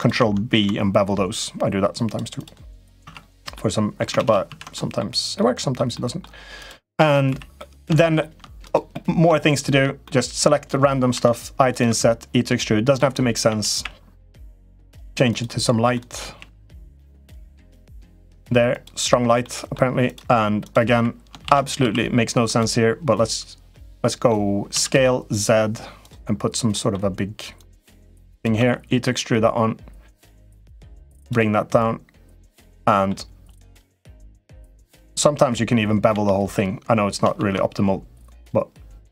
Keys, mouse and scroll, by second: 0.2 ctrl+b, 2.4 middle click, 2.8 Tab, 3.3 middle click, 4.0 ctrl+z, 4.1 ctrl+z, 4.2 ctrl+z, 4.5 middle click, 5.1 middle click, 5.7 middle click, 6.3 click, 7.1 3, 7.3 middle click, 7.7 shift+middle click, 8.5 click, 8.7 middle click, 9.2 scroll up 1, 9.3 shift+middle click, 9.8 middle click, 11.1 i, 11.7 e, 13.2 a, 13.5 g, 15.8 shift+middle click, 16.1 g, 18.2 g, 19.2 middle click, 19.8 click, 20.4 click, 21.2 shift+d, 21.4 3, 21.6 s, 23.6 middle click, 24.5 s, 26.6 middle click, 27.5 click, 28.3 e, 30.4 middle click, 30.8 2, 30.9 click, 31.6 click, 32.6 middle click, 33.3 click, 34.4 middle click, 34.8 click, 35.9 l, 37.1 ctrl+b.